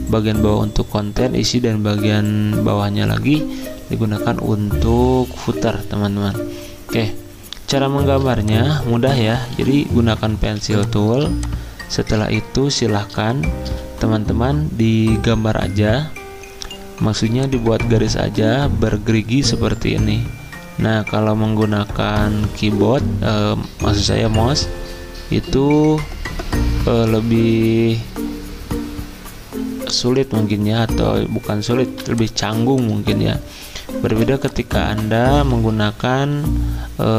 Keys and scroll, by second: 0.0 n, 8.1 v, 9.5-10.4 typing, 11.6-12.4 typing, 18.1 n, 31.9 v, 32.4 z, 34.1 v, 35.3 d, 35.9 shift+x, 36.3 shift+x.